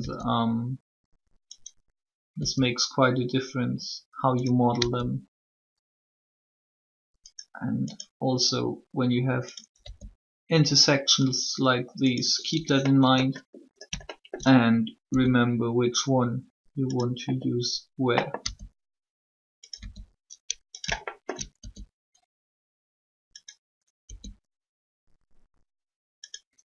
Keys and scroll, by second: 0.0 e, 2.3 e, 4.7 e, 9.7 e, 16.3 e, 18.3 e, 24.0 e.